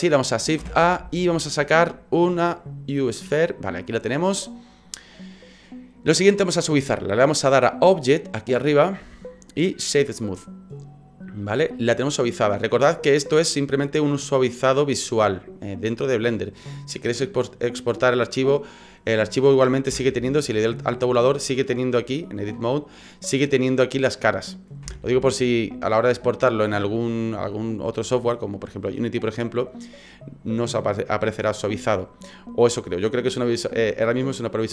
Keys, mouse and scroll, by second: 0.6 shift+a, 4.7 scroll up 5, 8.6 click, 12.5 middle click, 13.2 scroll up 5, 13.6-15.6 scroll down 1, 19.9 Tab, 24.8 Tab, 26.2 scroll down 2, 27.8-29.3 scroll down 1.